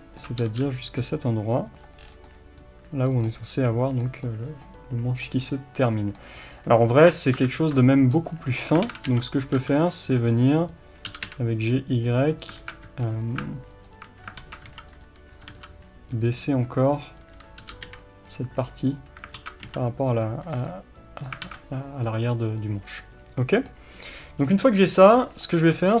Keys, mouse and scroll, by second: 0.4 g, 2.0 scroll down 1, 2.3-11.1 middle drag, 3.2-4.3 scroll up 1, 6.4-6.8 scroll up 1, 7.3 ctrl+KP_7, 8.1-8.8 scroll up 1, 8.8 alt+a, 9.3 b, 11.1 g, 12.4 click, 12.6 alt+a, 13.3 b, 13.8 alt+click, 14.4 alt+a, 14.9 b, 19.4 alt+a, 20.0 b, 20.5 scroll down 1, 20.6-26.0 middle drag, 21.4 alt+a.